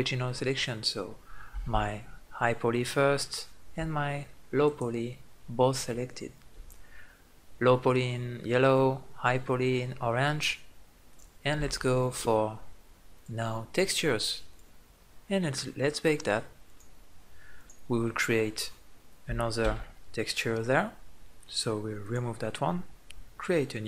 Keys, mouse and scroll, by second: 5.9 click, 10.8-14.6 drag, 15.3-16.4 middle drag, 16.4-18.1 drag, 18.7 middle click, 19.4 Tab, 23.0-23.8 drag.